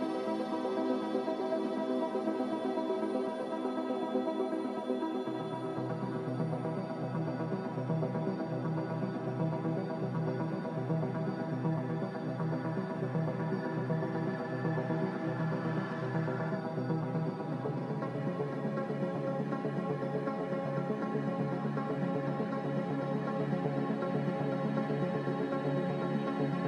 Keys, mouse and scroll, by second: 5.5 b, 9.2 Escape.